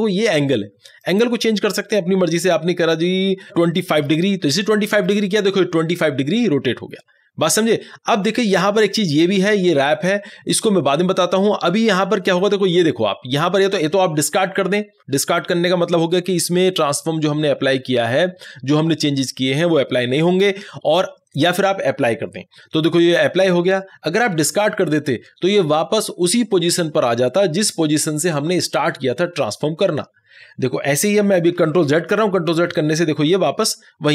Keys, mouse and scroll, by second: 0.6-3.6 drag, 3.6 2, 31.6 ctrl+z.